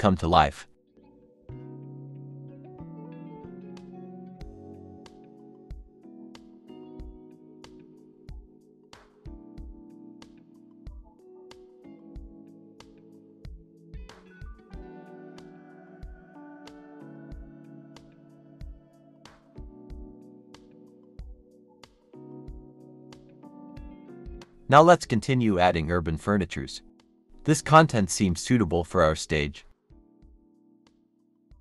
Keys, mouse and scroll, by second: 0.2-3.1 typing, 0.9 scroll down 1, 1.8 Escape, 2.2 Escape, 2.9 Escape, 4.6-6.5 typing, 7.6-9.6 typing, 8.3 scroll up 1, 8.9-9.6 scroll down 2, 9.9 double click, 10.2 shift+click, 11.7 g, 12.1 Escape, 13.1 scroll up 1, 13.2-14.6 typing, 15.3-16.3 scroll down 2, 15.6 Escape, 18.5 scroll up 1, 20.4-22.3 typing, 22.2 scroll down 1, 29.3 typing, 31.0 Escape, 31.2 typing.